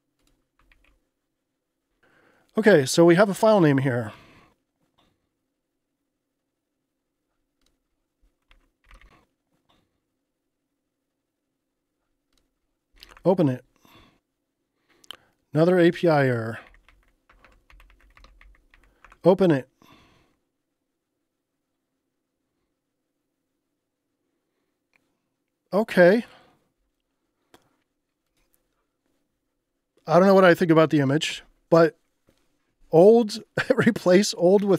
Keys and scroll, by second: 0.7 super+r, 8.3-9.5 typing, 12.7-13.5 typing, 16.4-19.2 typing.